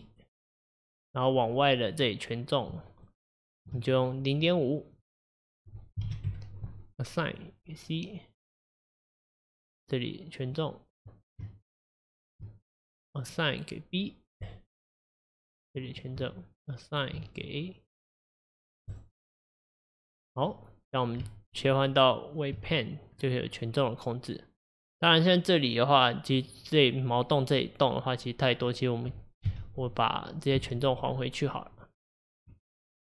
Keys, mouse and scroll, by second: 0.5-1.9 drag, 3.6 shift+click, 7.3-11.0 drag, 12.2 shift+click, 13.2 click, 14.5-15.9 drag, 17.0 shift+click, 18.9 click, 19.5-22.6 drag, 22.6 Tab, 23.2-23.5 scroll down 2, 23.5-26.5 middle drag, 29.4 KP_1, 30.5 KP_3.